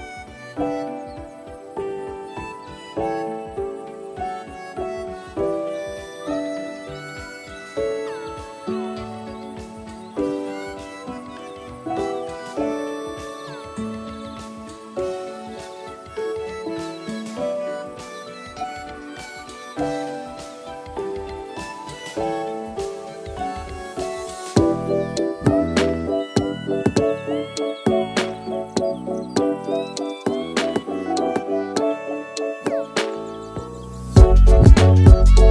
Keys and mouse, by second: 0.1 shift+click, 0.9 shift+click, 2.0 ctrl+b, 7.3 alt+e, 14.6 click, 16.6 click, 17.8 click, 19.7 3, 19.9 middle click, 20.3 middle click, 21.0 middle click, 22.6 i, 25.4 i, 30.2 x, 32.6 alt+z, 33.5 1, 34.4 alt+click, 35.1 alt+click.